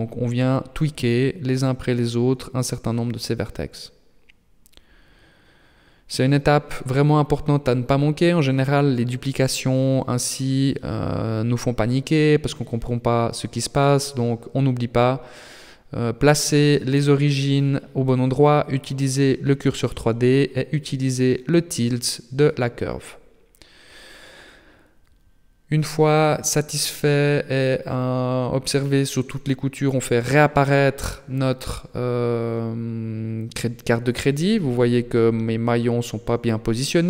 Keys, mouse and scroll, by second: 0.8 right click, 2.4 ctrl+t, 4.5 right click, 4.9 ctrl+t, 7.6 right click, 8.7 ctrl+t, 11.8 scroll down 4, 12.1 Tab, 12.6 middle click, 15.2 middle click, 17.4 middle click, 18.5 middle click, 19.2 shift+middle click, 19.5 middle click, 22.1 KP_3, 23.4 KP_1, 25.0 shift+middle click, 25.9 shift+middle click, 26.7 KP_3, 27.6 shift+middle click, 28.6 alt+h, 29.2 scroll up 3, 31.1 scroll down 2, 31.4 middle click, 33.4 right click, 34.7 KP_3, 35.5-35.8 scroll up 3, 36.1 shift+middle click, 36.6-37.0 scroll up 1.